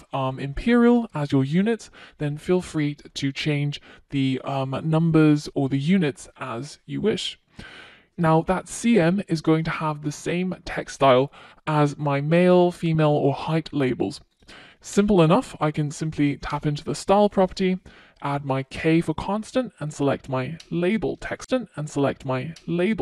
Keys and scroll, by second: 17.9 Return.